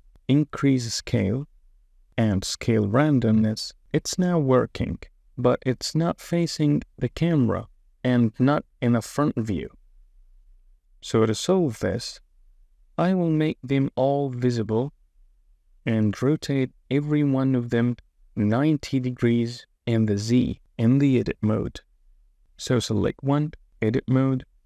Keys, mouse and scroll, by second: 0.8-1.9 drag, 2.2-3.4 drag, 5.1 space, 8.4 space, 9.2 space, 10.3 space, 11.8 space, 12.3 KP_0, 13.6 click, 17.6 Tab, 19.4 r, 20.9 z, 21.3 KP_9, 21.4 KP_0, 22.1 Return, 22.2 Tab, 23.6 Tab.